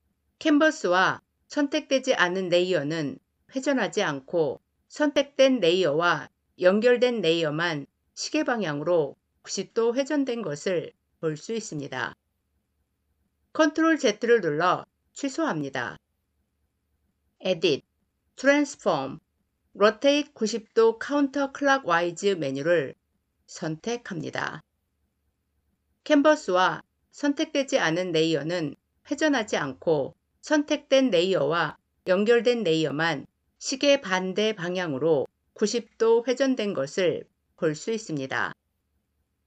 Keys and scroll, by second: 13.2 ctrl+z.